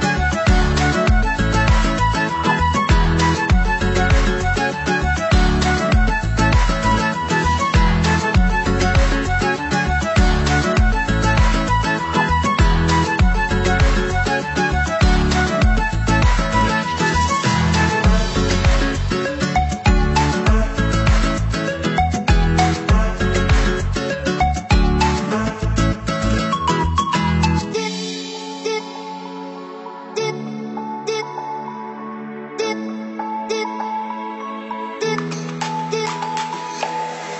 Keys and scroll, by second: 19.0 ctrl+z, 19.7 ctrl+z, 33.9 ctrl+z, 35.7 ctrl+0.